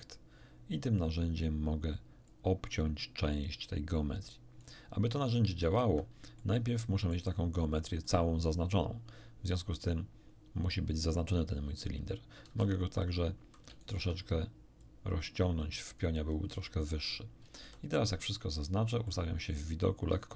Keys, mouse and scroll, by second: 2.2-4.8 drag, 5.6 ctrl+z, 6.3 ctrl+middle click, 7.2-7.9 scroll up 4, 8.0-10.0 middle drag, 12.4 a, 13.8 alt+shift+right click, 14.8 alt+shift+click, 15.0-16.1 middle drag, 16.3 scroll down 1, 17.4 a, 17.6 a, 18.8 scroll down 1, 19.0-20.3 middle drag.